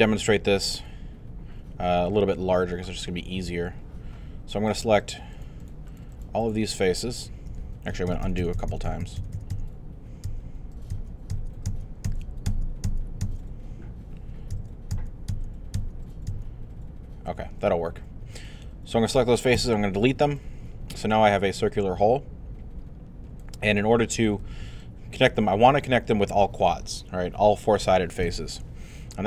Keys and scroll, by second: 7.9 shift+z, 14.5 z, 19.6 Delete, 20.1 alt+Delete.